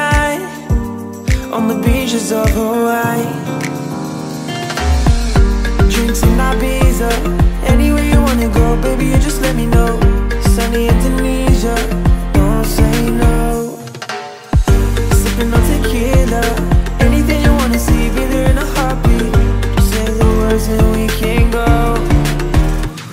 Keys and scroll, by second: 4.5 Return.